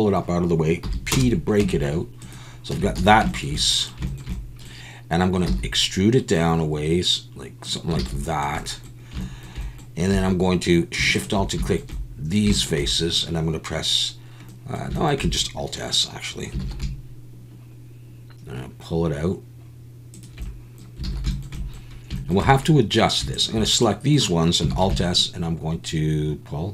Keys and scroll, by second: 0.8 p, 1.6 Tab, 2.7 Tab, 3.0 a, 5.4 e, 8.0 alt+a, 10.1 3, 16.6 alt+s, 21.1 alt+a, 24.7 alt+s.